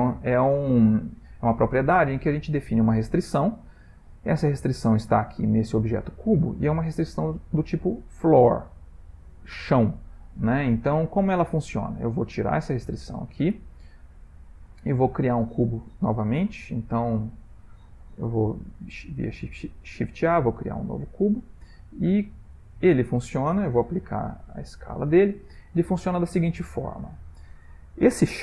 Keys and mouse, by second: 0.0 ctrl+middle click, 1.0 middle click, 2.2 ctrl+middle click, 5.0 click, 5.6 g, 13.1 click, 14.5 click, 14.7 x, 16.5 shift+middle click, 17.3 shift+right click, 18.1 shift+a, 21.3 g, 22.5 s, 23.8 ctrl+a, 25.5 middle click, 26.6 ctrl+middle click, 27.1 middle click.